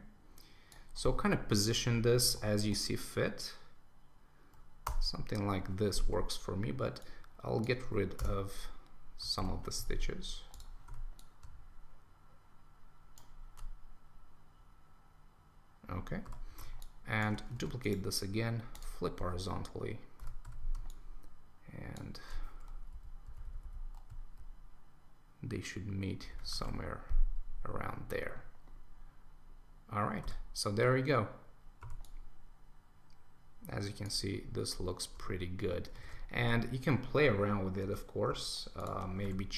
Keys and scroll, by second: 1.6 Right, 2.2 Up, 4.8 Return, 9.4 super+Return, 17.6 super+t, 20.2 Return, 22.9 Left, 26.3 super+s, 26.6 super+1, 36.0 super+1.